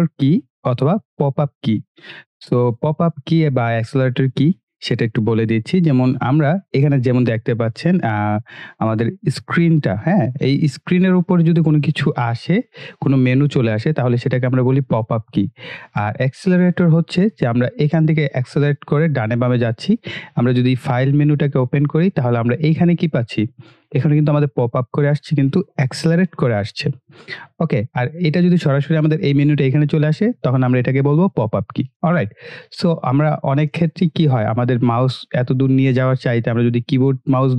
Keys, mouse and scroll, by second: 21.1 click, 32.0 click.